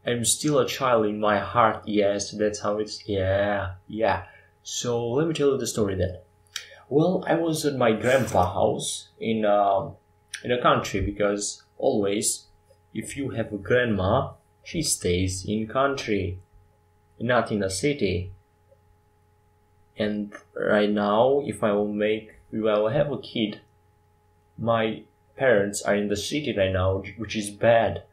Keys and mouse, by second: 2.7 KP_5, 3.3 KP_7, 16.2-20.0 drag, 16.8 shift+a, 20.1 Tab, 21.0 click, 21.4 shift+a, 27.6 w.